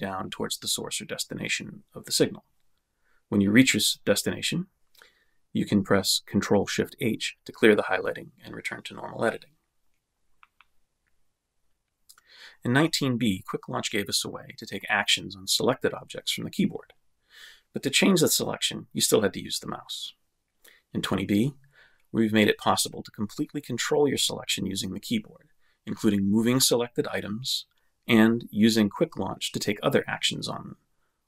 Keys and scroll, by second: 5.9 ctrl+shift+h, 15.7 Right, 17.5 Left, 19.6 Right, 21.1 Right, 21.6 Up, 22.6 Left, 24.1 shift+Left, 26.0 m, 26.6 Down, 28.3 m, 28.9 Left, 29.9 Left, 30.2 Down, 30.5 shift+Up, 31.1-31.2 typing.